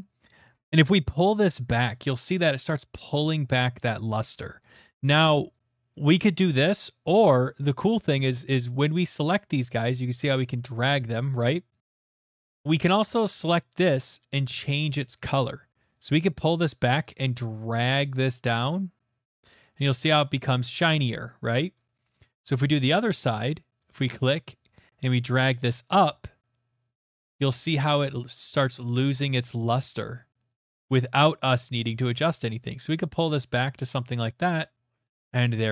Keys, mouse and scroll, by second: 0.1 click, 5.5 right click, 5.9 click, 8.3 click, 10.7 click, 12.2 click, 13.5 click, 21.7 click, 22.2 click, 23.9 click, 24.5 click, 33.5 click, 34.1 click, 34.9 middle click, 34.9 middle click.